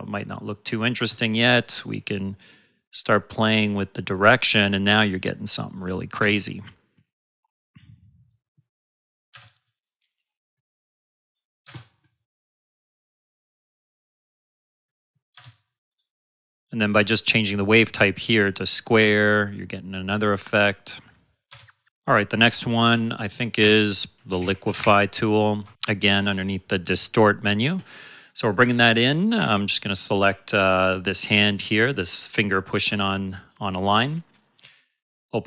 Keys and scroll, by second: 0.9 space, 6.1 space, 9.3 space, 11.6 space, 15.3 space, 18.9 space, 21.4 space, 23.5-25.3 typing.